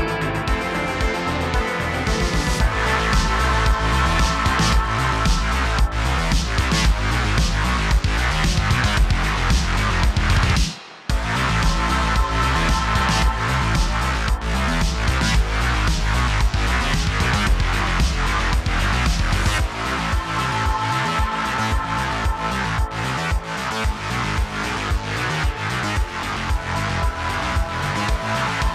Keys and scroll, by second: 0.8 typing, 12.2-13.5 typing, 21.2-22.3 typing, 25.2 typing.